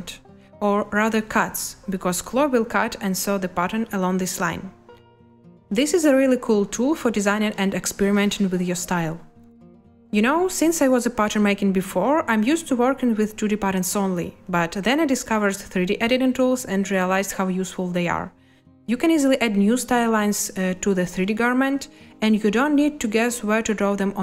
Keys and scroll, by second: 3.6 a.